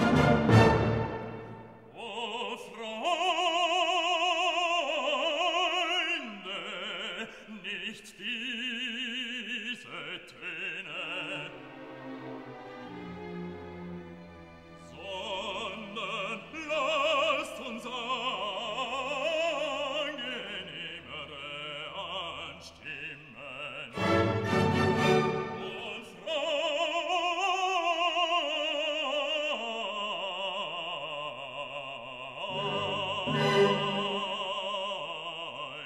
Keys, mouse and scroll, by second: 5.9-7.6 drag, 7.6-9.0 drag, 11.0 scroll down 1, 12.7-17.3 drag, 17.3-28.7 drag.